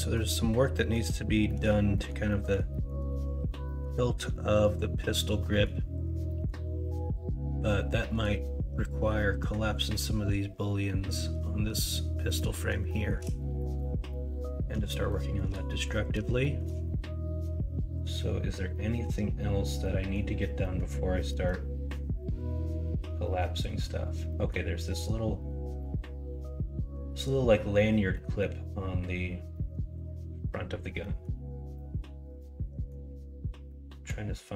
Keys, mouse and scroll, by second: 0.7 middle drag, 1.4 shift+middle drag, 1.9 middle drag, 2.2 middle drag, 2.7 shift+middle drag, 3.6 middle drag, 5.3 middle drag, 6.2 middle drag, 12.2 middle drag, 12.8 shift+middle drag, 13.5 middle drag, 14.0 middle drag, 15.1-15.4 shift+middle drag, 15.6 middle drag, 16.4 shift+middle click.